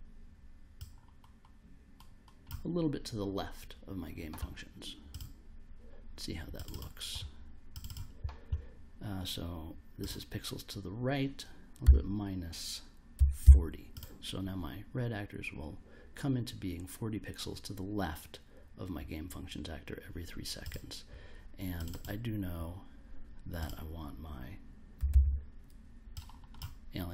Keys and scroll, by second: 11.8 -, 13.1 4, 13.4 0, 24.7-25.6 typing.